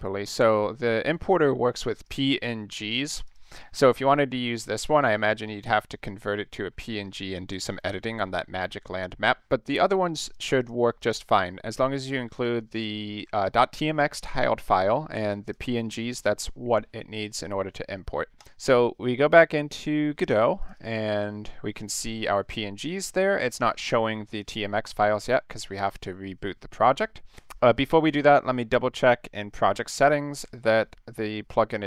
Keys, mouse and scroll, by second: 2.0 click, 2.7 click, 3.2 click, 4.1 click, 7.5 click, 9.8 click, 10.2 click, 10.6 click, 11.0 click, 12.3 click, 12.7 click, 15.4 click, 18.4 click, 20.6 click, 20.7 click, 25.2 click, 28.1 click, 29.5 click, 30.6 click.